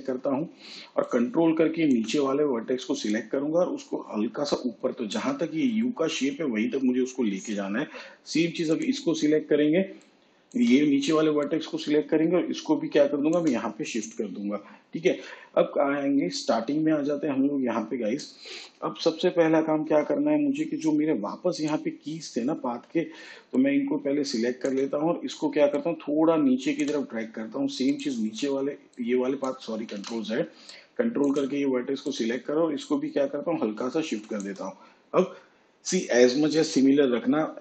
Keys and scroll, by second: 31.3 ctrl+z.